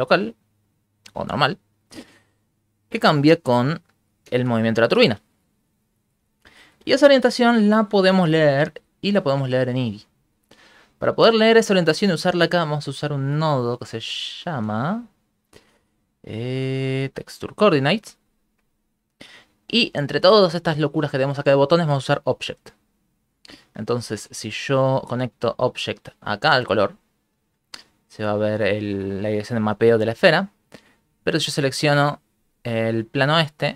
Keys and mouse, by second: 2.1 middle click, 2.6 ctrl+middle click, 2.9 middle click, 3.3 shift+space, 3.8 shift+middle click, 4.3 shift+space, 5.0-9.0 Right, 10.0 middle click, 10.8 right click, 11.9 middle click, 13.3 middle click, 14.3 shift+a, 19.0 shift+middle click, 19.8 click, 20.1 click, 20.4 click, 20.6 click, 20.8 click, 21.0 click, 21.2 click, 23.8 shift+middle click, 25.3 click, 27.7 ctrl+middle click, 28.7 shift+middle click, 30.7 click.